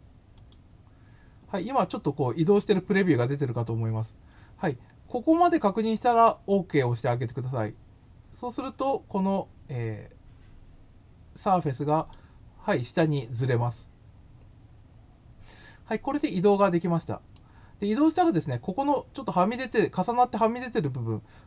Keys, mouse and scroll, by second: 0.4 click, 11.9 click, 16.2-17.3 middle drag.